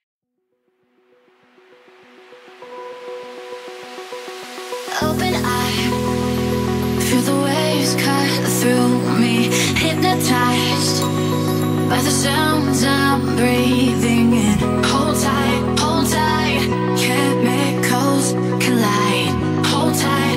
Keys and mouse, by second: 0.8 middle click, 1.7 r, 2.0 y, 5.4 click, 6.4-6.8 shift+middle drag, 7.3 middle click, 7.8-8.9 drag, 9.4 KP_1, 10.1 r, 10.7 click, 12.3 click, 13.5 r, 14.7 y, 19.2 ctrl+a.